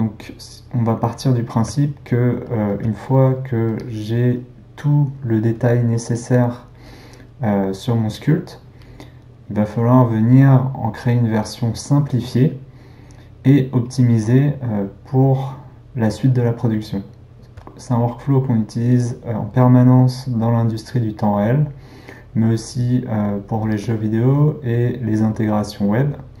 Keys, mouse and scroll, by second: 3.7-17.3 drag, 17.3-23.7 shift+middle drag, 23.7-26.4 drag.